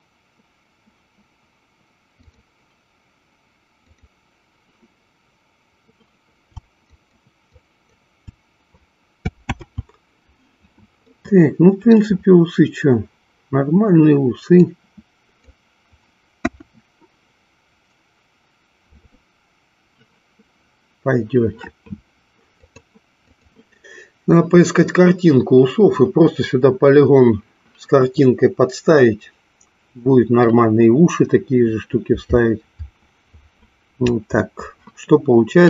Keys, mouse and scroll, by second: 3.9 click, 6.9 shift+click, 7.5 shift+click, 9.4 ctrl+z, 11.2-12.3 middle drag, 14.6 click, 16.4 KP_1, 22.7 click.